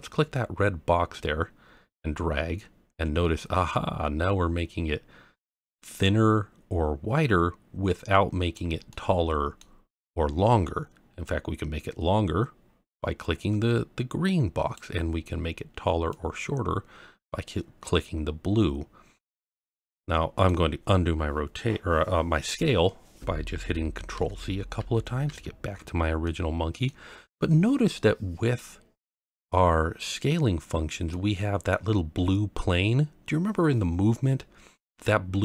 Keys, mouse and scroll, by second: 1.9 click, 8.9-9.6 middle drag, 11.2 click, 16.1 click, 19.6-19.9 scroll down 1, 19.9-20.5 middle drag, 24.1 ctrl+z, 24.8 ctrl+z, 25.7 ctrl+z, 26.2-26.9 middle drag, 27.2-28.2 scroll up 1, 28.2 scroll up 1, 31.1-31.7 middle drag.